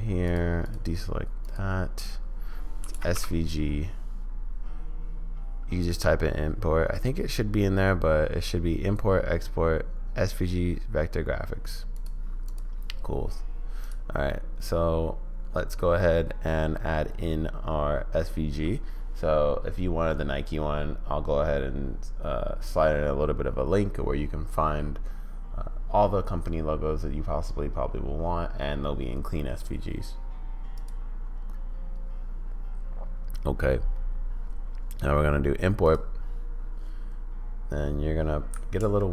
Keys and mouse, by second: 12.5 click, 14.2-15.7 drag, 30.7-36.0 drag.